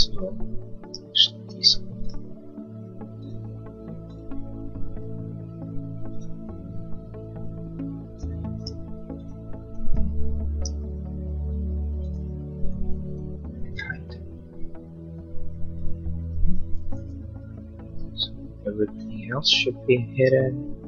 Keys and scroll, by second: 13.8 h, 17.0 h.